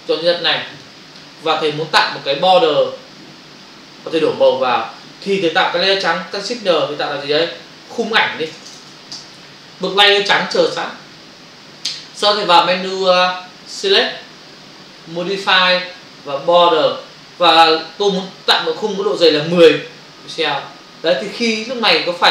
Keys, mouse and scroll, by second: 8.9 typing, 9.2 Return, 13.7 click, 16.4 click, 19.8 Return.